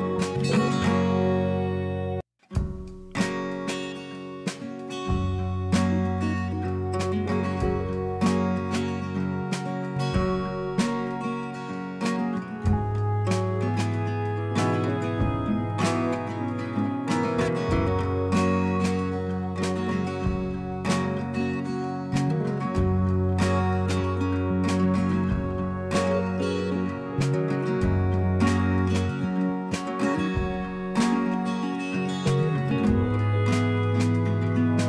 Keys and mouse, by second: 2.7 Delete, 5.5-7.6 drag, 7.9 Delete, 12.2 click, 17.5 click, 25.3 click, 27.3 click, 29.8 click, 34.0 alt+shift+Down.